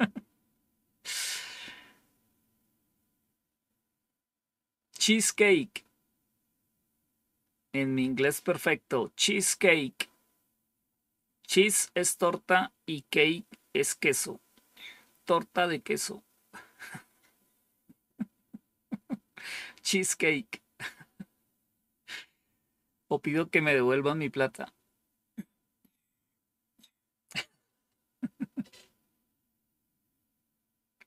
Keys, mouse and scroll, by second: 30.5 scroll down 2.